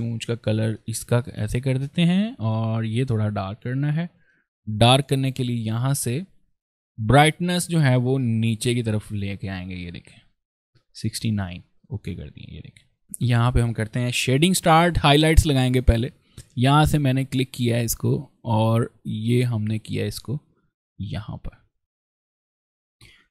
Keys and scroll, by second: 13.0 ctrl+z, 14.2 p, 17.6 ctrl+z.